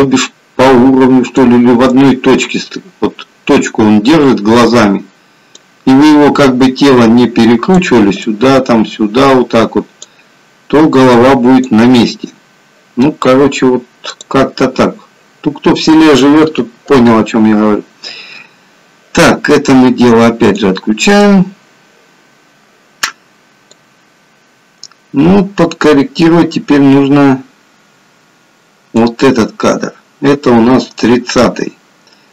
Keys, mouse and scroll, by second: 24.1 click, 29.8-30.5 scroll down 2.